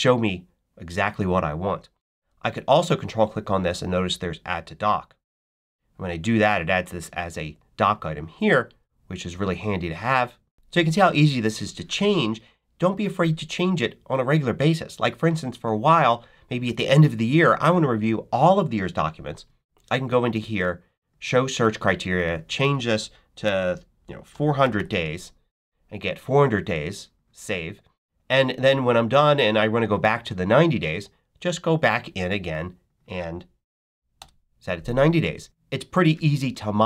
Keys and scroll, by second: 24.2 4, 24.5 0, 30.5 Up, 33.6 9, 33.9 0, 34.0 Return.